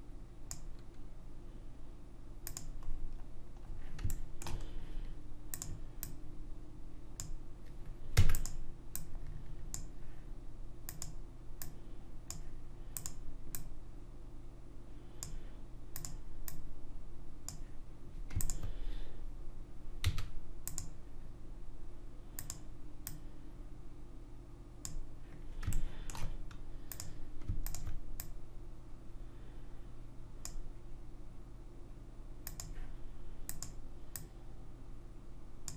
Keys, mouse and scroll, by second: 2.9 middle click, 3.6-4.1 scroll up 1, 4.1 middle click, 5.5 click, 5.5 right click, 8.1 e, 8.9 click, 10.8-15.4 drag, 18.4 click, 20.0 w, 22.3 click, 25.7-26.9 middle drag, 26.9-30.0 drag, 26.9-28.4 right drag, 33.4 click.